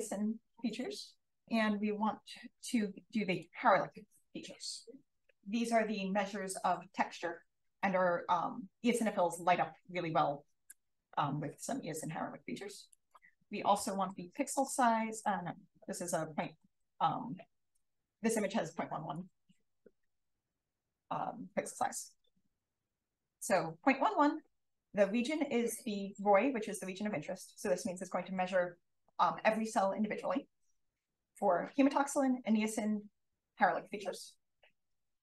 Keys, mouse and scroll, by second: 3.2 click, 12.8 click, 13.5-15.1 typing, 16.3-17.2 typing, 19.0 click.